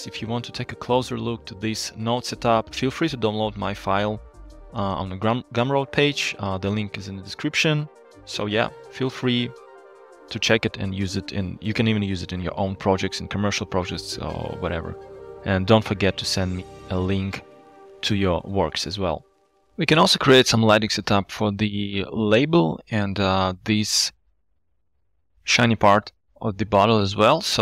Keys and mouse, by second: 0.7 click, 1.7 click, 2.5 click, 5.0 click, 5.9 g, 9.7 drag, 25.4 shift+middle click.